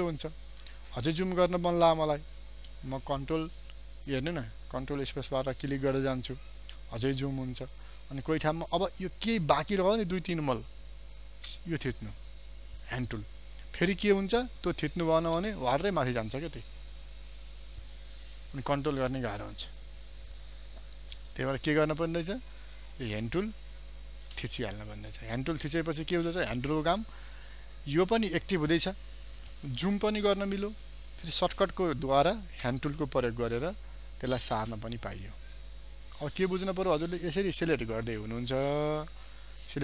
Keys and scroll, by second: 1.0 ctrl+space.